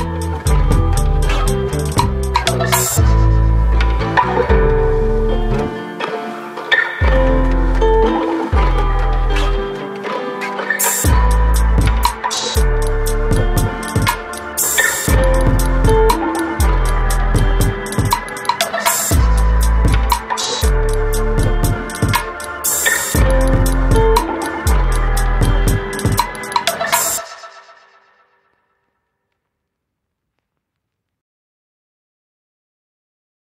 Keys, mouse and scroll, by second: 0.3 click, 4.0 click, 4.9 click, 6.6 middle click, 7.5 n, 8.6 click, 9.5 middle click, 11.2 n, 11.8 alt+middle click, 13.3 click, 15.0 click, 17.1 click, 19.9 click, 20.7 click, 23.6 click, 23.7 click, 25.1 click, 28.3 click, 29.3-30.3 typing, 31.5-33.2 typing.